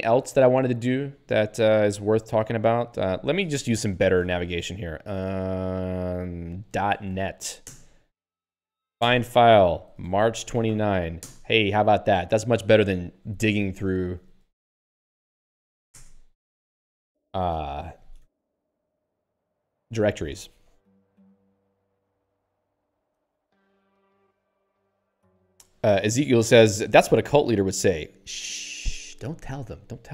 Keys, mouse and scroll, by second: 0.1 click, 0.2 click, 1.6 ctrl+f, 3.0 ctrl+g, 6.7 ., 7.1 t, 9.1 Return, 9.7-11.2 typing, 12.1 Return, 14.3 alt+x, 14.8-16.2 typing, 18.3 ctrl+j.